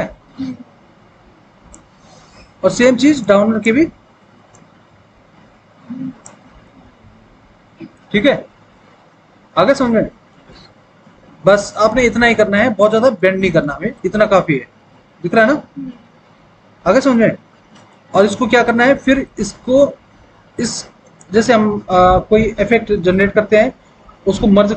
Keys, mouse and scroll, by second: 5.5-7.2 drag, 7.2 middle click, 9.1-10.2 scroll up 1, 10.2-10.8 scroll down 1, 13.3 alt+w, 13.8 alt+w.